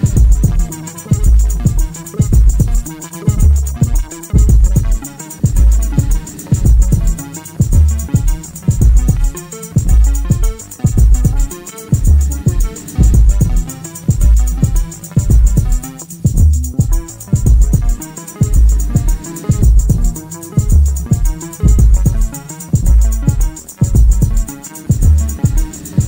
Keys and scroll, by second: 1.4 ctrl+d, 1.6 Escape, 6.0 2, 6.7 ], 7.8 ], 9.3 ctrl+z, 10.6 ], 11.5 3, 12.0 4, 14.1 f, 21.1 2, 25.9 4.